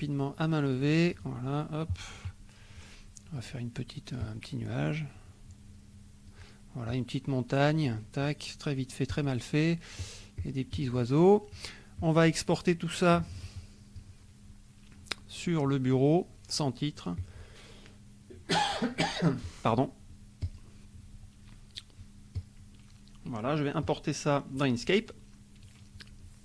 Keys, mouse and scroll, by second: 0.0 click, 1.1 click, 4.3 click, 6.9 click, 9.1 click, 10.0 click, 12.0 click, 17.1 click, 20.6 click, 22.5 click, 23.8 click.